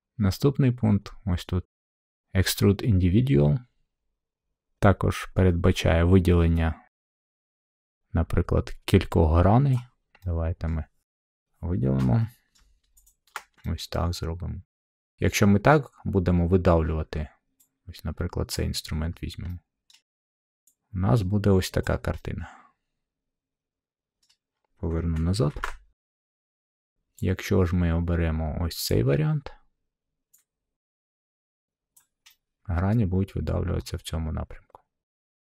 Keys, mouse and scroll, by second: 9.7 click, 10.6 scroll, 11.2 click, 12.5 middle click, 13.0 shift+click, 13.4 scroll, 14.0 shift+click, 14.8-15.9 middle drag, 18.5-19.6 drag, 19.8-20.9 middle drag, 21.8 click, 24.1 middle click, 25.5 ctrl+z, 28.8-29.8 drag, 29.9 click, 32.2 click, 32.8 click, 33.5-34.6 middle drag.